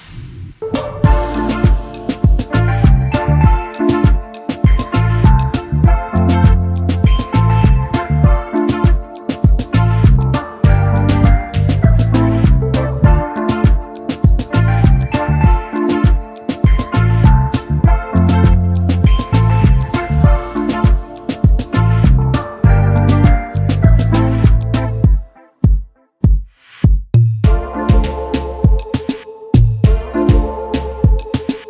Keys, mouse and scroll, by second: 1.0 shift+click, 1.9 shift+click, 2.8 shift+click, 6.7 ctrl+x, 8.8 ctrl+g, 10.1 double click, 11.1 ctrl+f, 12.3 double click, 12.7-13.3 alt+scroll down 1, 13.3 alt+scroll up 1, 14.1 double click, 15.0 shift+click, 16.4 double click, 17.3 alt+scroll down 1, 17.9 double click, 18.4 space, 19.7 space, 19.7 double click, 23.2 double click, 25.7 double click, 27.2 ctrl+x, 27.9 ctrl+f.